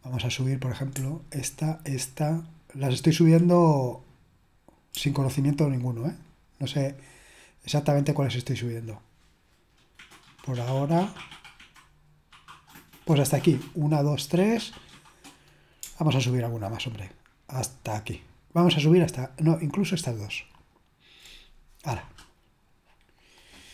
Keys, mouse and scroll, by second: 1.5 shift+click, 2.4 shift+click, 3.0 shift+click, 3.6 click, 4.4 click, 5.1 ctrl+click, 5.9 ctrl+click, 6.5 ctrl+click, 7.1 ctrl+click, 7.6 ctrl+click, 8.2 ctrl+click, 10.2 ctrl+click, 16.1 ctrl+click, 16.9 ctrl+click, 17.6 ctrl+click, 19.0 click, 19.4 click, 20.7 ctrl+click, 22.4 click.